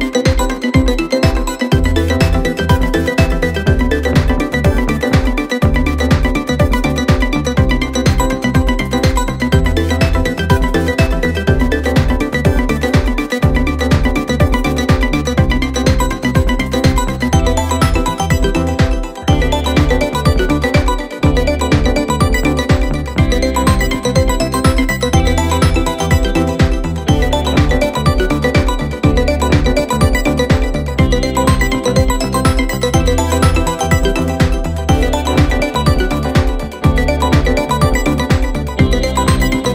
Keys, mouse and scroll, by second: 1.1-1.7 scroll up 2, 1.7-7.7 drag, 7.9 click, 8.6-11.6 drag, 11.6-12.5 scroll down 9, 12.5-16.8 drag, 12.7 Left, 12.9-13.8 Left, 14.1 Left, 14.6 Left, 15.0 Left, 15.0 Left, 15.3 Left, 15.9 Left, 16.1 Left, 16.8 scroll down 2, 18.5-19.8 scroll up 2, 19.8 click, 20.2 g, 21.6-22.8 middle drag, 22.8-24.2 drag, 24.2-24.7 middle drag, 24.7-25.3 scroll up 1, 25.3 click, 26.0 KP_7, 26.8 s, 28.2-30.3 middle drag, 30.3 g, 31.0-31.3 middle drag, 31.3 space, 33.2-33.6 middle drag, 33.6 click, 33.9 click, 34.5 g, 36.6-38.0 middle drag, 38.0 click, 39.2-39.7 middle drag.